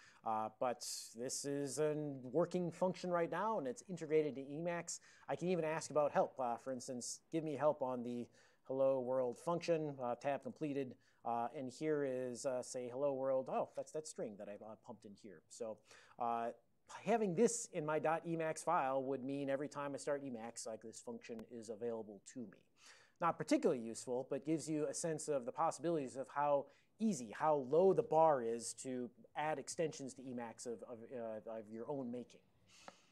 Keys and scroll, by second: 7.8-9.7 typing, 11.3 Return, 11.3 alt+o, 11.8 ctrl+n, 12.0 ctrl+n, 12.2 ctrl+n, 12.4 ctrl+n.